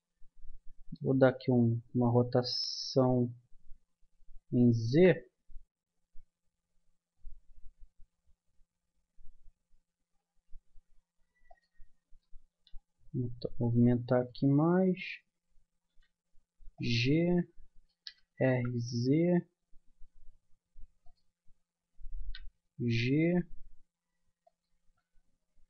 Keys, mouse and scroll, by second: 1.4 r, 12.5 g, 15.9 g, 18.0 r, 22.2 g.